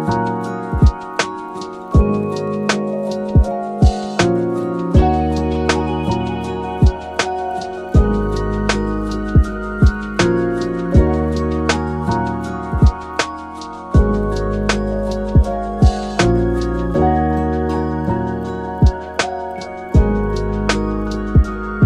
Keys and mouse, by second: 2.8 click, 4.7 click, 7.0-9.2 drag, 11.1-11.8 middle drag, 12.6 middle drag, 13.9 middle drag, 14.3 shift+middle drag, 14.7 shift+d, 16.9 shift+middle click, 17.7 shift+d, 19.7 shift+Tab, 20.3 g, 21.3 middle click, 21.7 shift+middle drag.